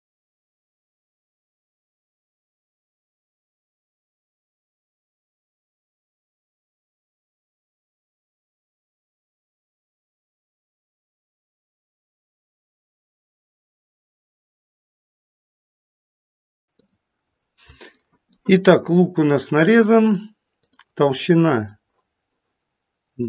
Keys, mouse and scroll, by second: 0.3 click, 1.0 click, 1.4 click, 1.7 click, 2.7 click, 5.7 click, 6.2 click, 7.0 click, 7.5 click, 7.9 click, 9.2 click, 9.7 click, 10.1 click, 11.7 click, 12.4 click, 12.7 click, 14.3 click, 15.0 click, 15.3 click, 16.5 click, 17.4-18.0 scroll down 2, 18.0 middle click, 19.5 click, 20.0 click, 20.6 click, 21.0 click, 21.5 click.